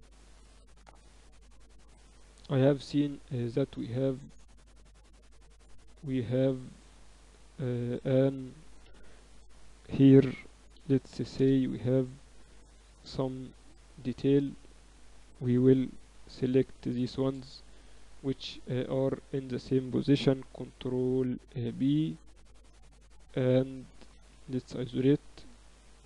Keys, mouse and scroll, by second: 1.1 KP_1, 1.6 Tab, 1.9 Tab, 2.4 Tab, 2.7 middle click, 3.4 ctrl+r, 6.5 ctrl+r, 8.0 a, 8.8 b, 10.2 s, 12.0 a, 13.6 click, 13.9-15.8 middle drag, 15.8 right click, 17.7-19.5 super+right drag, 20.3 ctrl+b, 24.2 KP_Divide, 24.6 KP_6, 24.9 KP_6, 25.2 KP_6, 25.3 z.